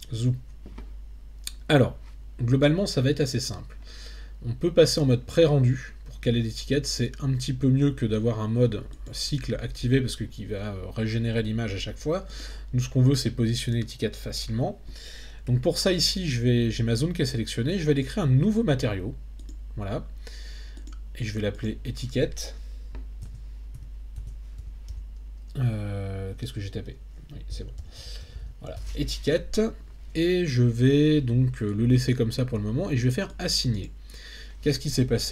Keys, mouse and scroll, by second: 6.3 click, 8.9 click, 12.4 click, 19.5 click, 20.8 click, 21.6-33.4 drag, 28.3 t, 33.8 click.